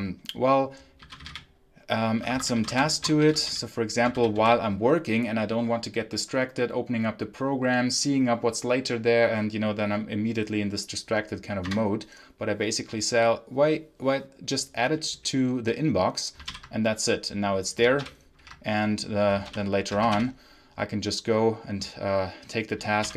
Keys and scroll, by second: 0.7-4.8 typing, 16.4 ctrl+l, 17.9 l, 19.4-20.5 typing, 22.9 l.